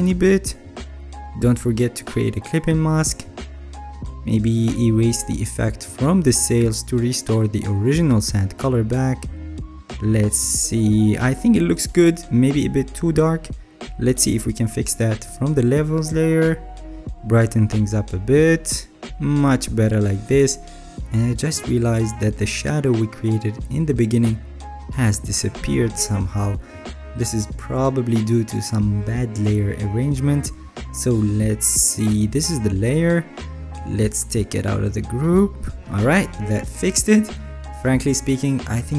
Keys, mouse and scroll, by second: 6.7 alt+right click, 6.8 alt+right click.